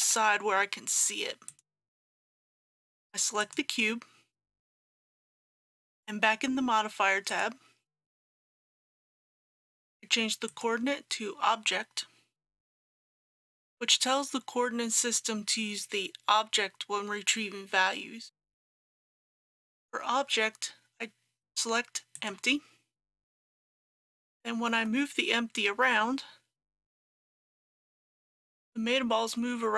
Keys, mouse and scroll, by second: 0.0 g, 1.5 click, 24.8 g, 25.7 z.